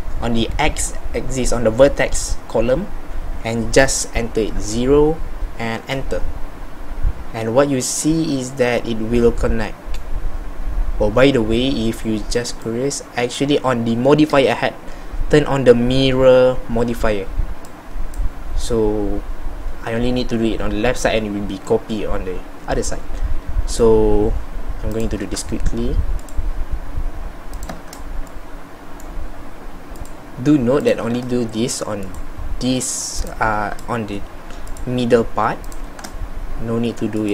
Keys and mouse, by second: 18.7-21.3 middle drag, 22.2 middle click, 28.4-37.3 middle drag.